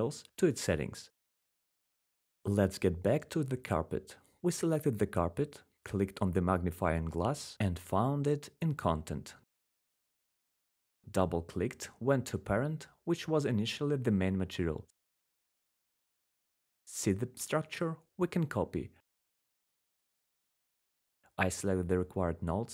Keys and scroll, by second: 22.2 ctrl+c.